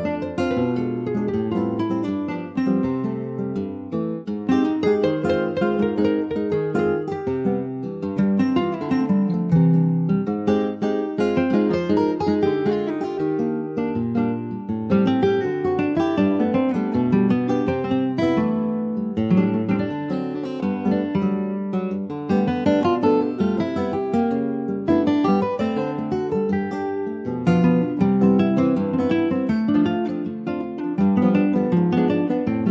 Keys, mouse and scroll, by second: 3.5 middle click, 3.9 s, 5.4-6.6 middle drag, 6.6 ctrl+s, 6.7 click, 7.2 middle click, 8.0 ctrl+s, 8.0 click, 8.5 Tab, 8.7-9.9 middle drag, 9.9 2, 10.3 click, 10.8 middle click, 11.5 shift+click, 12.4 Tab, 13.1 ctrl+a, 13.8 Tab, 14.8 ctrl+b, 24.6-30.6 drag, 32.2 click.